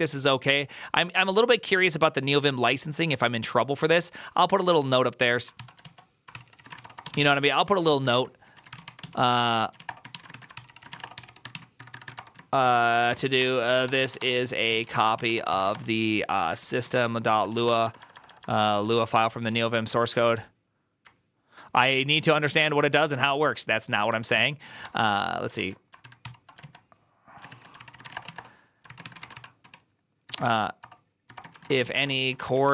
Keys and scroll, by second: 5.7 ctrl+c, 5.7 alt+{, 6.2 ctrl+c, 6.3-25.1 typing, 26.1 ctrl+l, 26.1 ctrl+c, 26.5 alt+{, 27.4 ctrl+v, 27.4-32.7 typing, 30.7 Return.